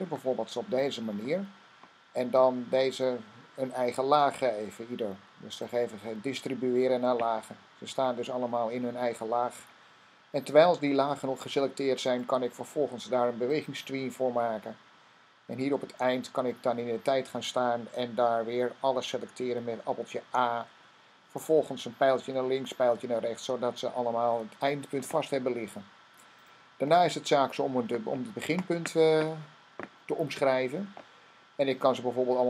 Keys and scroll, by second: 20.1 a, 22.9 Left.